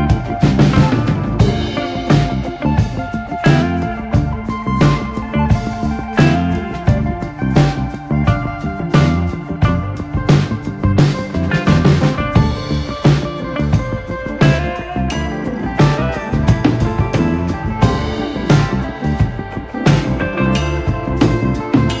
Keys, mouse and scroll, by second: 1.7 ctrl+z, 2.4 r, 4.3 KP_3, 4.5 KP_1, 5.1-6.5 shift+middle drag, 6.6 ctrl+z, 7.3 KP_7, 7.8 r, 9.2 click, 9.9 KP_3, 10.6 drag, 10.8 scroll down 1, 10.9-11.3 middle drag, 11.3 click, 11.7 shift+click, 12.1 ., 13.1 r, 15.2 KP_7, 15.8 r, 17.0 scroll down 1, 17.2-17.8 middle drag, 17.8 KP_3, 18.0 KP_1, 18.2 click, 18.4-18.7 scroll up 4, 18.7 shift+middle drag, 19.0 click, 19.4 g, 20.8 click, 21.0 g, 21.9 click.